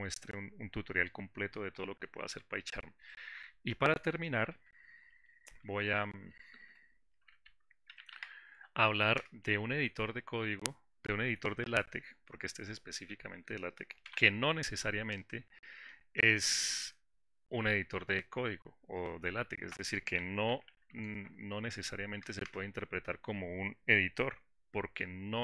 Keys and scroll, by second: 4.8 ctrl+shift+g.